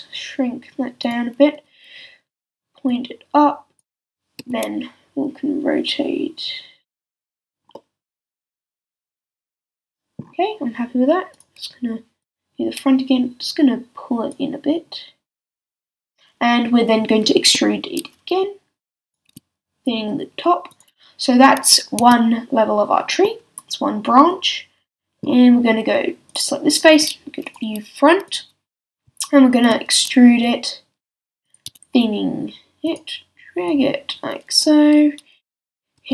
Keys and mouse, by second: 4.4 r, 6.8 click, 17.4-19.1 drag, 17.4-19.1 middle drag, 17.4-19.1 right drag, 19.0 e, 19.3 s, 22.0 a, 22.6 click, 22.6 middle click, 22.6 right click, 25.2-26.3 middle drag, 29.6 e, 31.6 s, 35.6-36.1 middle drag, 36.0 r.